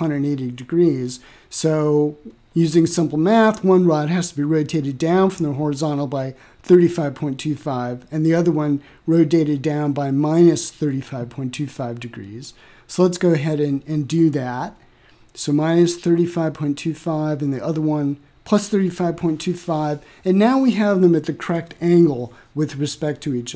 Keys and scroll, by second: 11.2-13.4 typing, 17.1-19.2 typing, 19.3 Return.